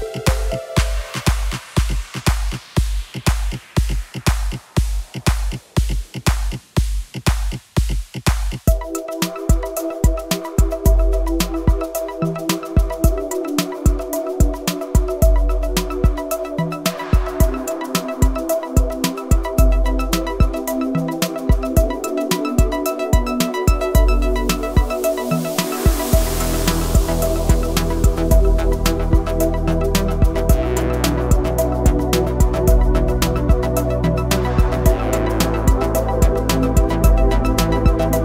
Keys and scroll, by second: 1.7 s, 2.2 t, 6.7 y, 12.7 s, 18.7 KP_1, 19.9-20.9 typing, 30.3 KP_1, 32.0 Tab, 35.3 e, 37.7 s.